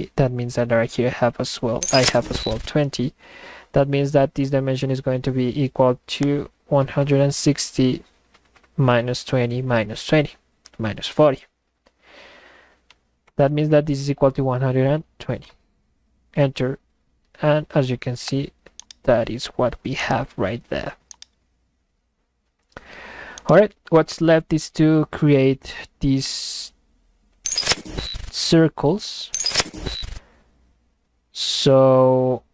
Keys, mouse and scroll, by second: 6.2 click, 18.3 click, 18.7-19.7 middle drag, 18.9-19.8 right drag, 19.9-20.7 middle drag, 20.0-20.8 right drag, 21.1-22.9 middle drag, 21.2-22.9 right drag, 23.3-24.0 middle drag, 23.4-24.0 right drag.